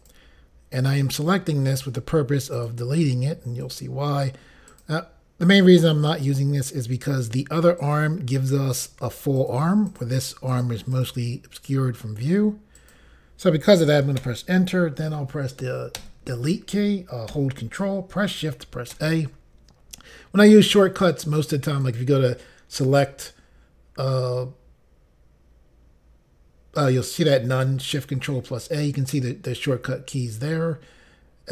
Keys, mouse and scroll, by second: 0.0 click, 1.2 click, 2.5 click, 3.6 click, 4.7 click, 6.1 click, 9.4 click, 9.9 click, 10.5 click, 10.9 click, 12.7 click, 14.2 Return, 16.0 Delete, 18.9 ctrl+shift+a, 21.9 click.